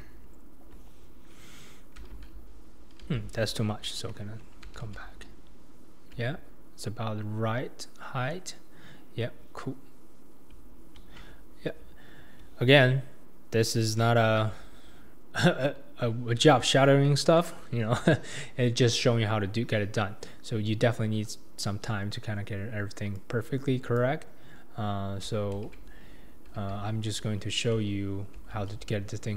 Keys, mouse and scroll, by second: 17.4 middle click, 17.9-19.8 middle drag, 23.2 click, 24.0 click, 25.5 alt+z, 26.6 ctrl+z, 28.3 alt+z.